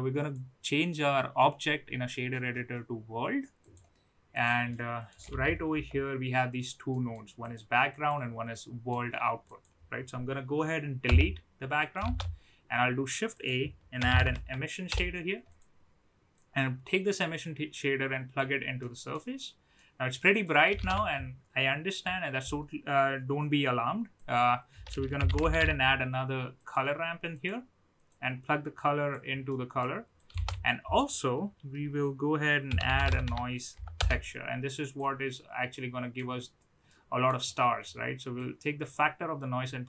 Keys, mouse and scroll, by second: 0.2-3.7 drag, 4.4 click, 4.7 middle click, 5.3 a, 5.7 KP_Decimal, 7.5 click, 8.0 click, 8.7 middle click, 9.5 click, 11.2 Delete, 11.9 click, 12.0 shift+a, 16.4-18.4 drag, 18.7-19.1 middle drag, 20.0 middle click, 20.3 click, 20.7 shift+a, 28.1-29.1 drag, 29.8-30.1 middle drag, 30.1 shift+click, 30.3 shift+a, 36.1-36.5 middle drag, 36.9-37.6 middle drag, 38.4-39.8 drag.